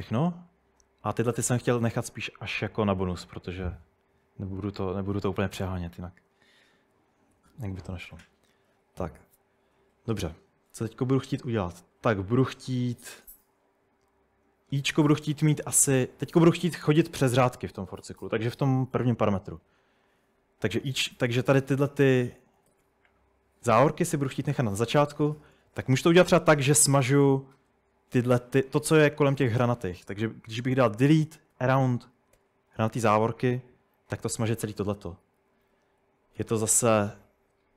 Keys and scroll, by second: 7.4 typing, 22.0-22.8 typing, 24.6 Escape, 25.2 Escape, 25.3-27.0 typing, 30.8-32.4 typing, 35.1 Escape, 35.4 u.